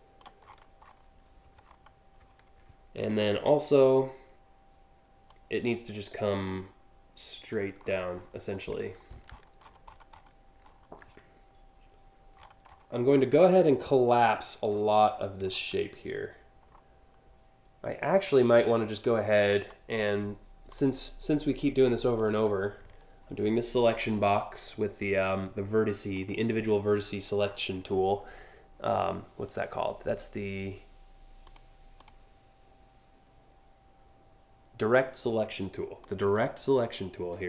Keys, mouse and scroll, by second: 0.1-0.5 scroll up 3, 1.3 alt+scroll up 2, 2.7 click, 3.0-4.9 drag, 5.9-7.1 drag, 7.4 scroll down 2, 7.7-9.9 scroll up 9, 10.3 ctrl+scroll up 1, 12.0-12.5 scroll up 3, 12.8 alt+scroll down 2, 14.3 alt+scroll up 1, 15.1 alt+scroll down 2, 16.4-18.0 alt+scroll down 3, 19.1-19.7 scroll down 2, 20.3 click, 21.8-25.8 drag, 31.1 click, 31.6 click, 35.6-37.4 drag.